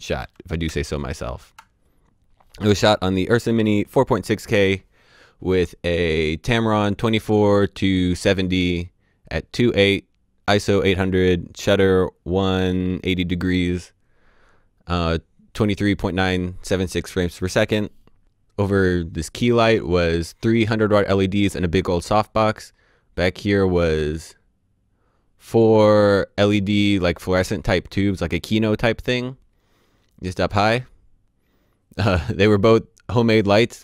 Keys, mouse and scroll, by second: 0.1 d, 0.6 d.